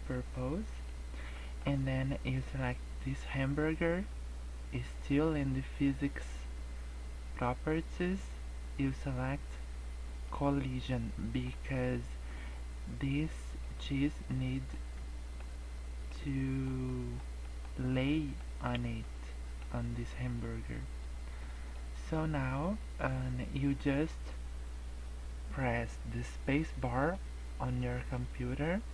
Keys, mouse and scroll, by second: 0.0 middle click, 1.3 middle click, 3.3 click, 10.2 click, 11.1 middle click, 13.6 click, 14.6 middle click, 16.0 middle click, 16.8 middle click, 17.4 middle click, 18.3 middle click, 19.6 middle click, 20.3 middle click, 21.4 middle click, 22.8 middle click.